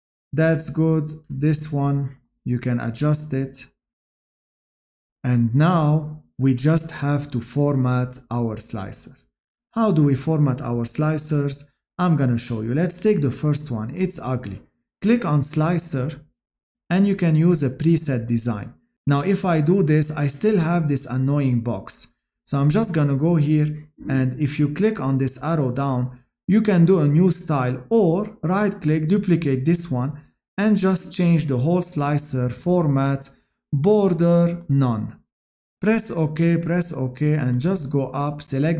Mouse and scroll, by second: 36.7 click.